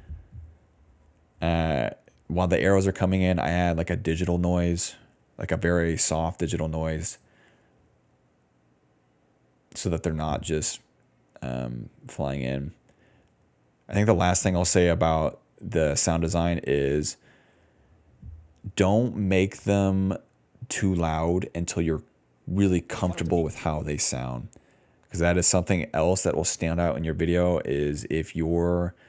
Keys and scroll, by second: 6.6-7.8 typing, 14.3 s, 14.9 d, 15.1 d, 22.8 space, 23.1 s, 23.5 space.